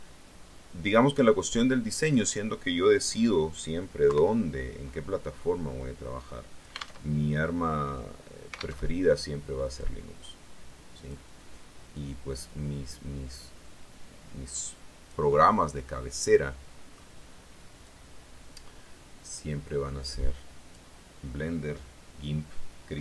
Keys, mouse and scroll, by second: 1.9 click, 3.9 KP_3, 5.2-6.9 drag, 6.9 alt+Tab, 8.7 alt+Tab, 9.7-11.1 drag, 11.8-15.1 drag, 15.1-17.0 middle drag, 17.7-20.8 drag.